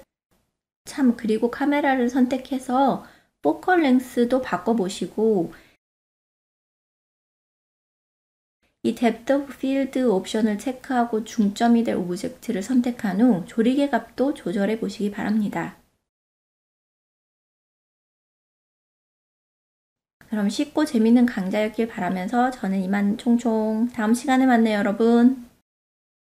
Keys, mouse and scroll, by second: 1.6-3.0 drag, 3.1 KP_Enter, 5.3 click, 6.2 ctrl+middle drag, 6.5-6.9 middle drag, 7.1 ctrl+middle click, 8.0 click, 11.2 click, 14.3 click, 19.4-21.8 drag, 23.4-24.6 drag.